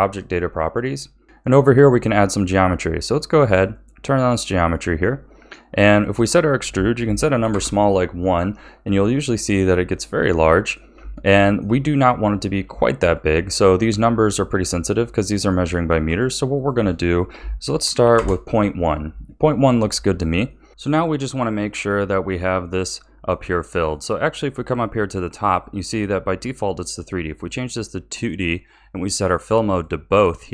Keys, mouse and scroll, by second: 0.2 click, 3.5 click, 4.4-6.0 scroll down 2, 6.0-9.0 drag, 9.9-11.1 middle drag, 11.1 shift+scroll down 1, 11.2-16.5 shift+middle drag, 16.5-19.5 drag, 20.0-20.5 scroll up 1, 20.5 middle drag, 22.9-26.7 middle drag, 27.3 click, 28.1-29.7 middle drag, 29.7-30.5 drag.